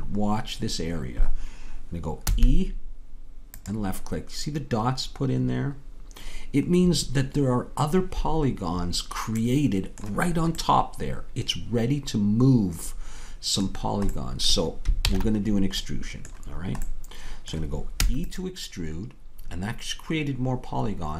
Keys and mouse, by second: 2.3 e, 7.3-12.4 middle drag, 13.8 middle click, 15.1 ctrl+z, 18.0 e.